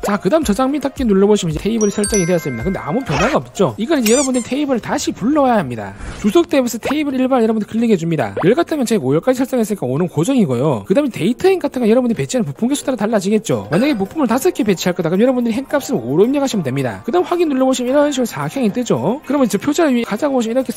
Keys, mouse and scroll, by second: 1.7 click, 3.0-3.6 scroll up 2, 8.0 click, 16.2 click, 16.7 5, 18.3 click.